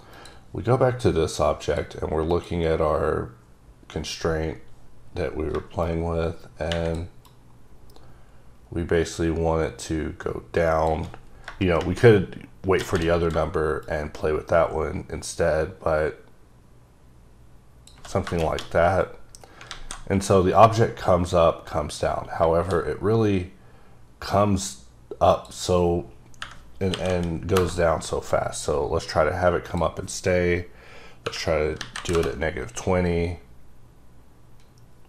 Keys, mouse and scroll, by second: 0.1 click, 2.3 click, 3.4-4.1 scroll down 1, 4.1-4.6 scroll down 2, 5.1-5.8 scroll down 3, 5.8 click, 7.2 shift+click, 13.8 shift+click, 19.7 a, 25.4 click, 26.4 KP_Subtract, 26.9 KP_4, 27.1 KP_0, 27.6 KP_Enter, 29.7 click, 31.2 KP_Subtract, 31.8 KP_2, 31.9 KP_0, 32.1 KP_Enter.